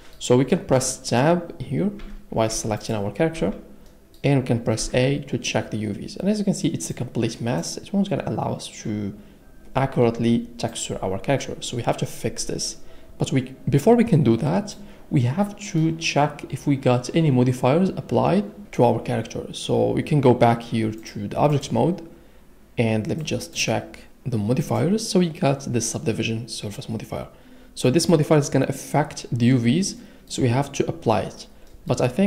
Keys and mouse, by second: 2.0 Tab, 2.5 Tab, 2.8-3.4 drag, 3.4 Tab, 4.8 a, 6.9-7.6 drag, 21.0-21.7 drag, 24.6 click, 30.0-31.6 middle drag.